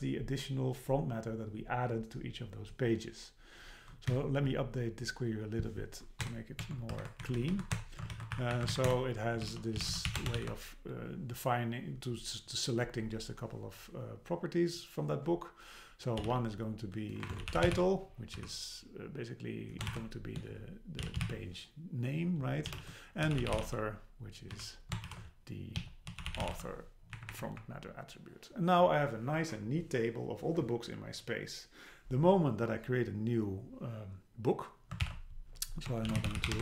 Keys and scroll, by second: 4.1 Down, 6.2 Return, 6.6 Tab, 7.0 super+Right, 7.2 Left, 7.8 Return, 8.1 shift+super+Left, 8.3 BackSpace, 8.5 Up, 8.7 super+Right, 8.9 Return, 17.2 BackSpace, 27.2 Up, 35.0 super+k.